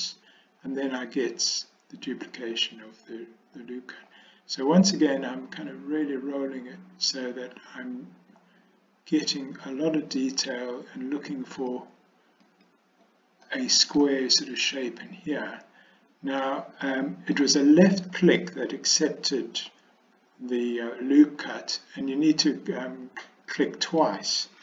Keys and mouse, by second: 13.5 middle click, 16.5 middle click, 18.4-19.6 middle drag, 23.3-24.1 middle drag.